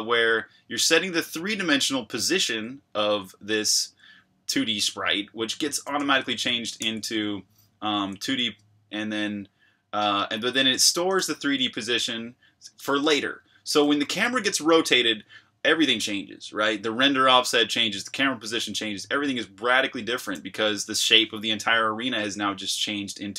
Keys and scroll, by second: 5.9-8.2 typing, 10.9-11.9 typing, 13.2-13.9 typing.